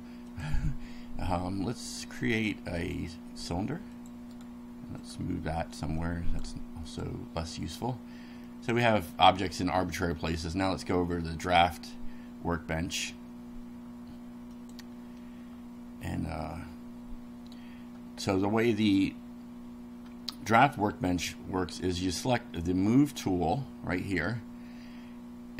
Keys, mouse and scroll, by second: 0.3 click, 2.8 click, 3.9 click, 4.3 right click, 5.0 click, 6.0-6.6 drag, 6.8 click, 7.7 click, 8.4-9.3 middle drag, 10.4 click, 14.6 click, 18.7-19.3 scroll up 2.